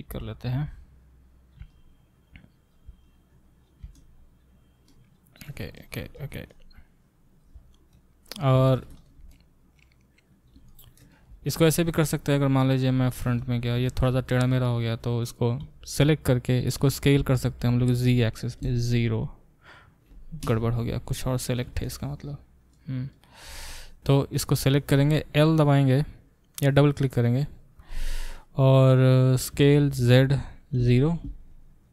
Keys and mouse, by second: 12.7 `, 15.6 a, 17.3 s, 29.5-31.9 middle drag, 29.5 s.